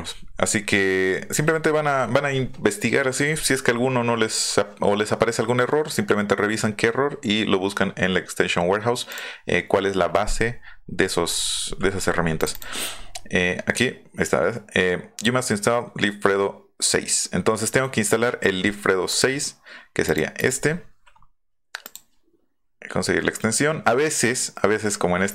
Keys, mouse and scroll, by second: 0.0-0.6 scroll up 4, 9.1 click, 12.3 click, 12.5 click, 19.0 click, 20.0 click, 20.4 click, 21.8 click.